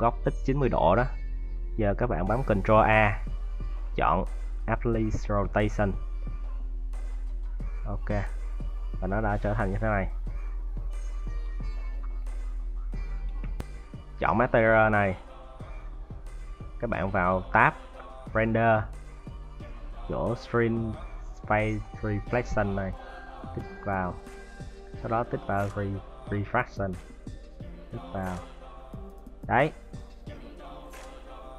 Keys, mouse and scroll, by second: 13.6 middle click, 15.7 scroll down 10, 28.4-29.2 scroll up 4, 29.2-29.6 scroll down 3, 29.6 middle click.